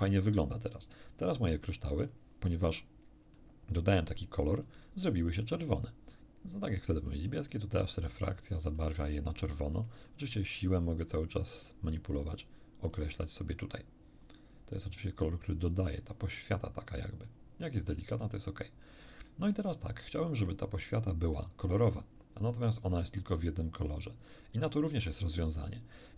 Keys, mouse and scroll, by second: 3.3-5.3 middle drag, 5.6 middle click, 6.7 middle click, 7.5 middle click, 8.6 middle click, 9.2 middle click, 9.8 middle click, 11.0-12.1 drag, 12.5 click, 13.5-16.2 drag, 16.5 scroll down 1, 17.2 middle click, 18.0 middle click, 18.6 middle click, 19.2 middle click, 20.0 middle click, 20.8 middle click, 22.1 scroll up 1.